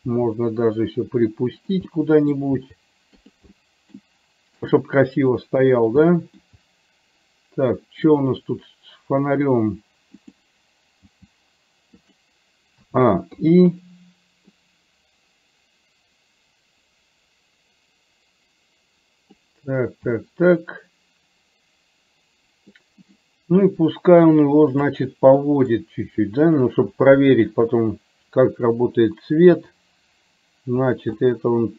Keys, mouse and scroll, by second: 0.2 r, 1.9 middle click, 2.7 r, 3.7 middle click, 4.8-5.8 middle drag, 6.2 middle click, 6.4-8.2 scroll down 1, 8.2 click, 11.1 g, 12.9 a, 13.4 i, 14.7-19.6 drag, 20.2-22.8 middle drag, 25.6 middle click, 27.6 KP_7, 29.7 r, 31.3 middle click.